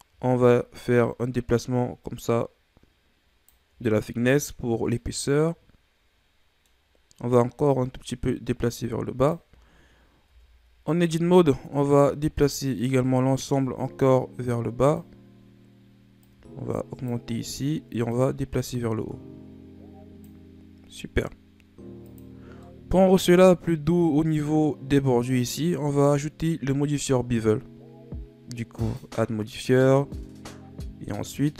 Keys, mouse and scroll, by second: 4.9-7.6 middle drag, 7.6-10.2 drag, 10.2 Tab, 11.1 a, 12.3-15.4 drag, 16.2-21.1 drag, 22.0 click, 22.6 middle click, 23.2 Tab, 28.7-31.5 drag.